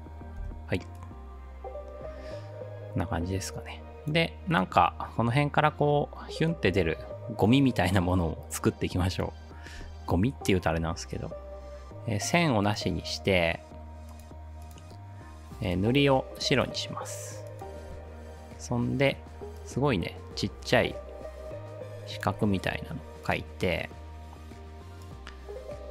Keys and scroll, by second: 0.4 space.